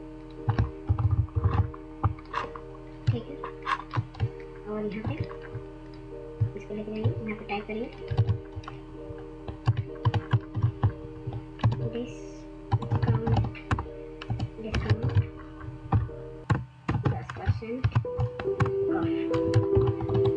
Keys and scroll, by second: 0.8-1.9 Down, 2.9 ctrl+space, 3.3 ctrl+space, 3.4 ctrl+space, 3.4-7.4 ctrl+space, 8.0 ctrl+a, 9.5 Caps_Lock, 11.5-14.9 typing, 14.9 ctrl+a, 15.7 Tab, 16.1-18.3 typing, 18.5 Return, 19.4-20.1 typing.